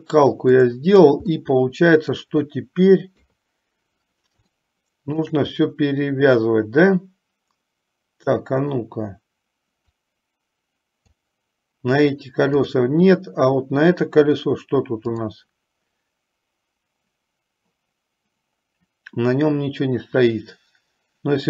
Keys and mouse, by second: 0.7 click, 1.7 middle click, 3.3 KP_3, 4.9 shift+middle click, 10.3-11.7 drag, 12.8 click.